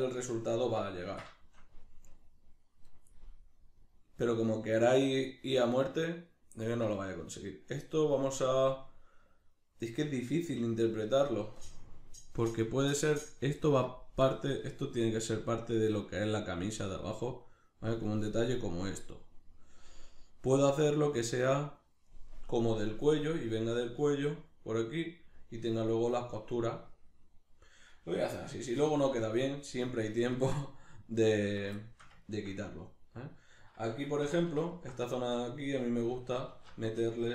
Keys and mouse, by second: 28.8 3, 29.0 right click, 30.0 ctrl+right click, 30.3 ctrl+right click, 30.6 ctrl+right click, 31.2 ctrl+right click, 31.8-34.7 shift+middle drag, 34.2 2, 34.7 alt+right click, 35.2-37.3 shift+middle drag, 36.5 alt+q.